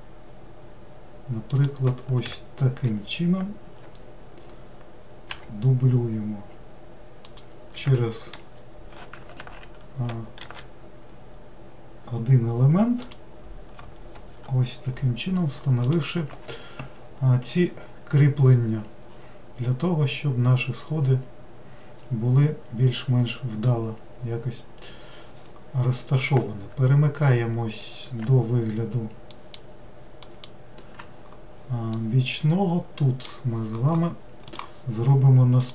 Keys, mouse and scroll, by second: 2.9 shift+r, 5.3 g, 8.3 shift+r, 9.4 ctrl+z, 10.5 shift+d, 14.2 shift+r, 29.4 alt+middle drag, 30.3 alt+middle click, 32.0-35.0 middle drag, 35.6 click.